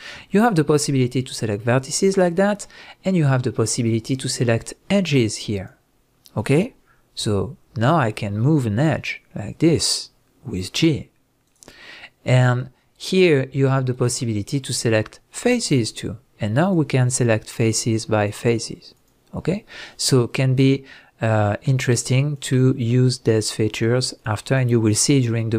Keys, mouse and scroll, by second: 4.1 click, 5.5 click, 7.2 g, 11.5 right click, 13.9 click, 15.9 click, 16.6 shift+drag, 17.1 shift+click, 17.7 shift+click, 18.3 shift+drag, 18.9 shift+click, 19.9-21.9 middle drag, 21.9 click, 22.3 click, 23.4 drag, 23.7 click, 24.2 drag, 24.5 click.